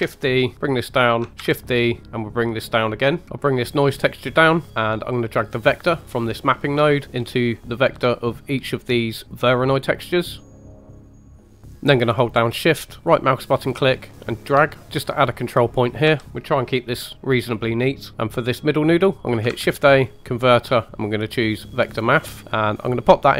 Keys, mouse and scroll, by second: 0.5 click, 0.5 middle click, 1.3 shift+d, 2.7 click, 3.2 middle click, 3.2 scroll down 1, 3.8 click, 4.7-5.0 scroll up 1, 5.0 middle click, 6.0 click, 6.4 right click, 6.9 middle click, 7.1-7.8 scroll down 2, 7.8 middle click, 10.4 click, 10.9 click, 11.7-13.0 middle drag, 11.7 scroll up 1, 13.8 shift+right click, 16.0 g, 18.1 shift+a, 19.6 shift+a.